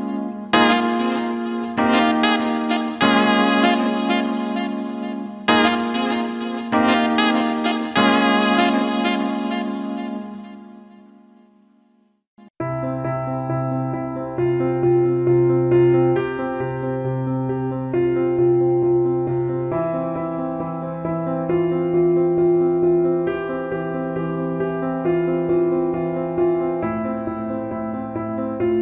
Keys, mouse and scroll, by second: 1.7 middle click, 2.5 middle click, 3.2 middle click, 8.0 middle click, 8.6 middle click, 9.0 middle click, 9.5 middle click, 10.8 middle click, 18.4 alt+middle click, 18.7 alt+shift+middle drag, 19.1 alt+middle click, 19.9 click, 20.9 alt+shift+middle click, 22.6 click, 23.2-24.0 ctrl+alt+middle drag, 24.1 alt+shift+middle click, 24.9 click, 25.6-26.8 ctrl+alt+middle drag, 26.9 alt+shift+middle click, 28.2 click.